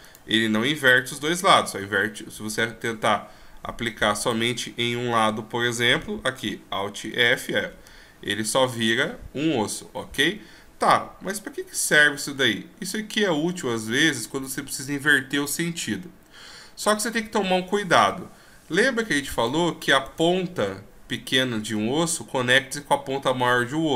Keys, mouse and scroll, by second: 0.0 right click, 4.2 right click, 5.2 scroll up 2, 7.1 alt+f, 7.9-8.5 shift+scroll down 1, 8.7 scroll up 3, 9.8-10.2 scroll down 2, 10.1-10.4 scroll up 2, 10.4-10.9 scroll down 5, 12.0-12.4 scroll up 6, 19.3 right click, 20.0 right click, 23.6 g.